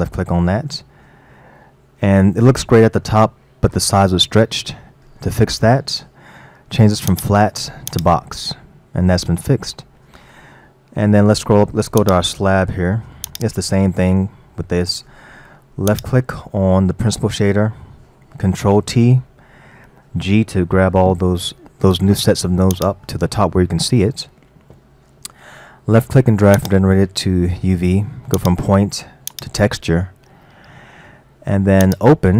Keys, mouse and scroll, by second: 1.4-6.2 middle drag, 7.1-9.1 drag, 9.1-10.9 middle drag, 10.9-11.7 scroll up 4, 11.7-12.0 scroll up 1, 12.0 click, 13.3-14.7 drag, 14.7-15.9 middle drag, 15.9 click, 18.7 ctrl+t, 20.2 g, 23.6-26.6 middle drag, 26.6 click, 28.4-30.4 drag, 30.4-31.9 middle drag, 31.9 click.